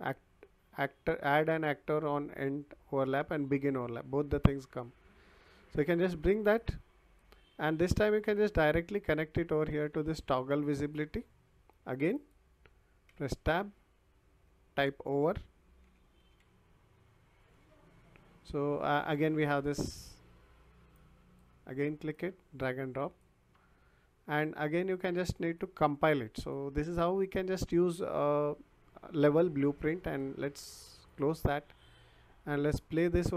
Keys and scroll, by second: 13.0 Tab, 15.1-16.9 typing.